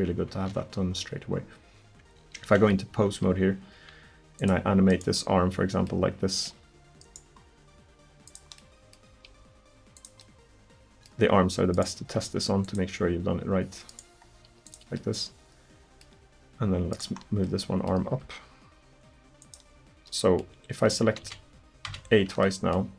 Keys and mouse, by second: 2.4 ctrl+Tab, 3.8 r, 4.9 right click, 7.1 right click, 9.1 r, 12.0 r, 14.3 r, 18.1 r, 20.1 middle click, 21.2 a, 21.9 a.